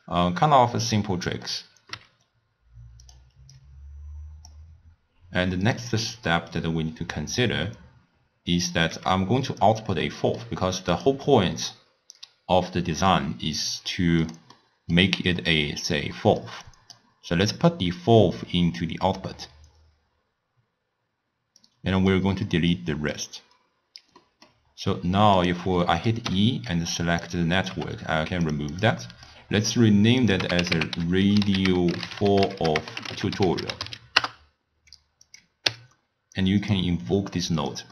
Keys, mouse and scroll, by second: 1.2 middle click, 2.0 g, 3.6 drag, 5.7 drag, 6.1-6.7 middle drag, 6.7 click, 9.0 g, 10.2-11.0 middle drag, 11.0-14.1 drag, 14.6 middle click, 15.4-16.2 drag, 16.2-16.7 middle drag, 16.7-17.6 drag, 21.7 click, 22.8 click, 24.3 middle click, 24.7-25.4 scroll down 6, 25.4 click, 25.9 middle click, 26.3 e, 27.7 g, 28.8 drag, 29.1 middle click, 29.6-30.3 scroll up 1, 30.3-32.2 drag, 32.2 l, 32.6 f, 35.3 click, 35.7 w.